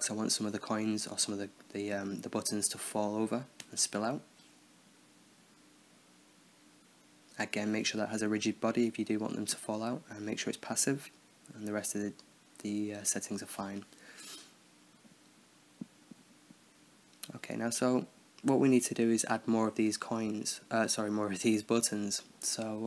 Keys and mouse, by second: 1.1 middle drag, 2.3 s, 3.4 KP_7, 3.8 KP_0, 7.6-10.2 drag, 12.0-13.2 middle drag, 13.2-14.6 right drag, 15.6-16.9 middle drag, 16.9-17.9 right drag, 18.3-20.0 middle drag, 20.0 Tab, 22.2 t.